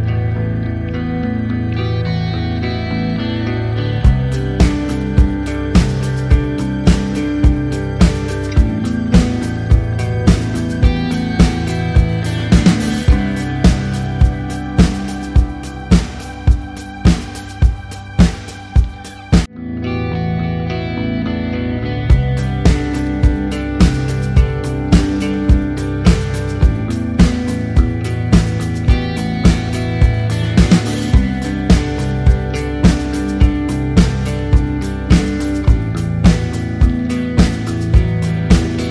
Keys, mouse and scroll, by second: 0.5 Return, 2.7 click, 7.7 click, 12.7-13.2 scroll down 1, 17.1 alt+click, 20.1 KP_Enter, 23.2 click, 26.8 Return, 27.5 click, 34.0 ctrl+[, 34.7 click, 38.7 click.